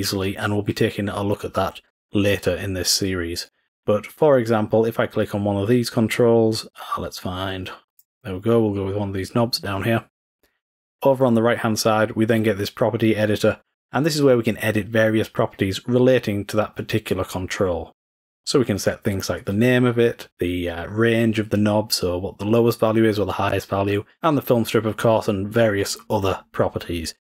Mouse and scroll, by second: 7.9-9.3 drag.